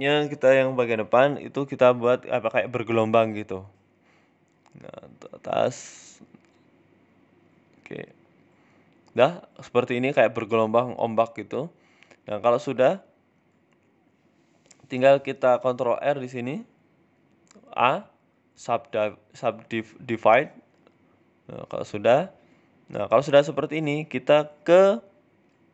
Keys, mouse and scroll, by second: 0.8 click, 1.6 click, 2.0 g, 3.7 click, 4.4 g, 5.5 Tab, 5.7 middle click, 5.9 scroll down 4, 6.1 middle click, 6.3-7.3 scroll up 1, 7.3 scroll up 2, 7.3 KP_7, 7.9 scroll down 2, 8.1 shift+middle click, 8.4 middle click, 9.0 KP_7, 9.8 z, 14.4 middle click, 14.6 Tab, 14.8 middle click, 15.6 ctrl+r, 16.5 middle click, 17.4 a, 17.9 w, 18.5 w, 19.3 middle click, 19.7 right click, 22.2 middle click, 22.8 KP_7, 24.3 middle click, 25.6 Tab.